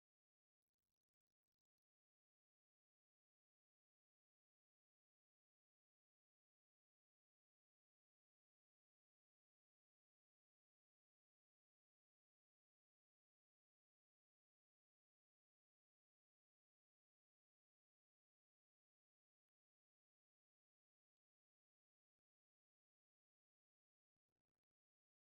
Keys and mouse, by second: 0.0 u, 7.8-9.4 middle drag, 9.4 Tab, 14.8 n, 24.3-25.2 drag.